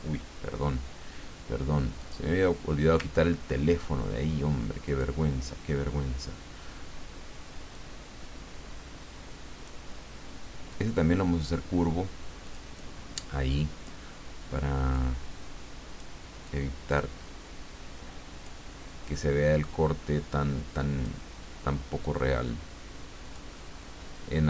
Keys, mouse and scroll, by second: 2.0 click, 3.3-3.6 ctrl+scroll up 2, 4.9 click, 7.7-9.8 drag, 10.7 click, 12.4 click, 14.9-16.2 drag, 16.4-18.9 drag, 19.6-21.4 drag, 22.0-23.9 drag.